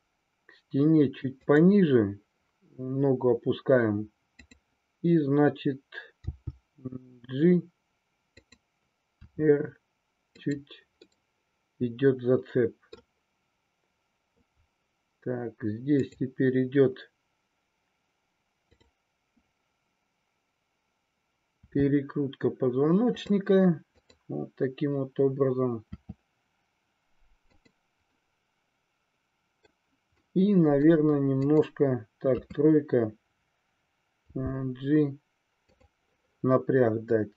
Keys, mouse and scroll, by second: 1.5 click, 4.2-5.6 drag, 6.2 g, 8.5 click, 9.2 r, 11.0-13.0 middle drag, 16.0-17.4 drag, 21.6 r, 23.2 click, 24.0-25.3 drag, 25.8 r, 27.6 click, 28.1-29.6 middle drag, 30.1-31.0 middle drag, 31.4 click, 32.6 KP_3, 34.2 g, 35.7 click.